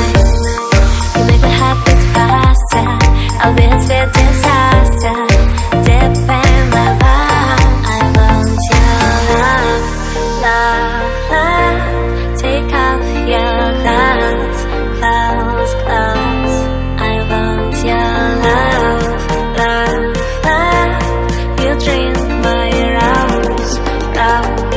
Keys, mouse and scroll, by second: 1.2 click, 1.9 click, 3.1 click, 6.0 click, 7.4 click, 7.8 click, 7.9 double click, 8.7 right click, 9.8 click, 10.3 click, 10.5 right click, 11.4 click, 12.1 click, 14.6 click, 15.5 click, 17.0 click, 17.1 click, 18.1 click, 19.0 click, 19.6 click, 21.5 click, 21.8 double click, 23.1 double click.